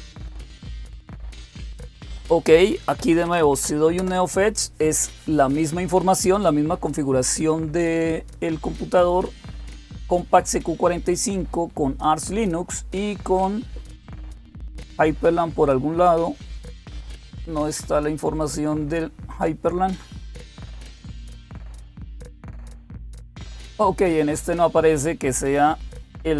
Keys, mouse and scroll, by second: 2.6-3.6 typing, 3.8 Return, 25.3 click.